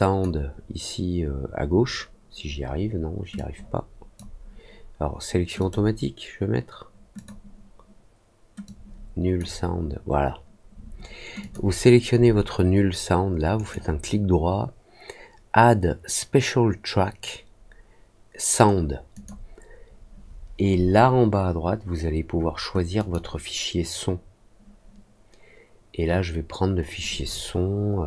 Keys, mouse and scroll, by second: 3.3 click, 5.5 click, 7.1 click, 8.6 click, 11.3 click, 13.5 right click, 19.1 click, 22.9 click.